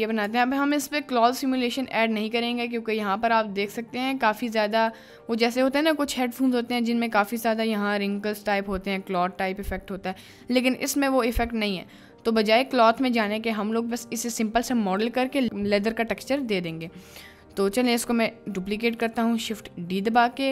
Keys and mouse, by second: 16.7 right click, 19.1 shift+d, 20.0 right click.